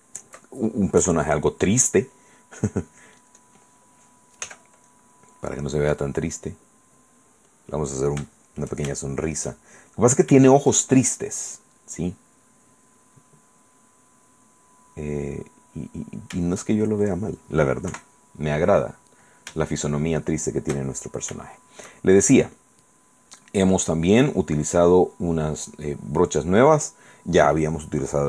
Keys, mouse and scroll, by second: 0.2 shift+middle click, 1.2 KP_1, 2.8 click, 3.6 click, 4.7 f, 5.1 click, 5.8-7.9 drag, 8.5 shift+click, 9.2 shift+click, 10.2 click, 10.7 shift+click, 11.2 shift+click, 12.7 click, 13.3 click, 13.7 click, 14.7 click, 15.0 click, 15.8 click, 16.8 shift+middle click, 18.1 KP_1, 20.0 shift+middle click, 21.0 shift+middle click, 21.7 shift+click, 22.2 shift+click, 24.4 click.